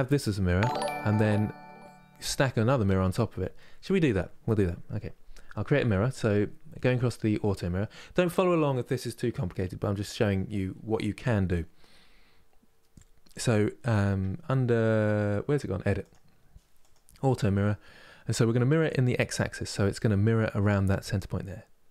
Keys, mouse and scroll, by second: 0.5-3.6 middle drag, 15.7 click, 16.5 click, 19.2-21.9 middle drag.